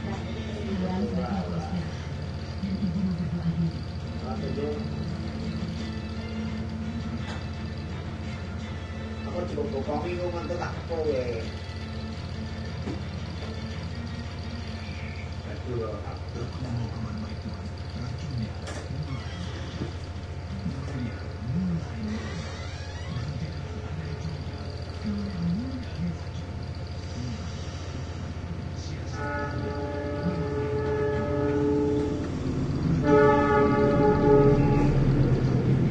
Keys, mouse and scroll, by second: 1.4 click, 2.3 click, 4.1 click, 6.0 shift+click, 10.0 click, 12.7 click, 13.7 click, 15.3 click, 17.0 click, 18.7 click, 19.6 click, 20.4 scroll up 1, 21.0 click, 24.0 click, 29.2 click, 30.8-32.6 typing, 33.9 click, 35.3 click.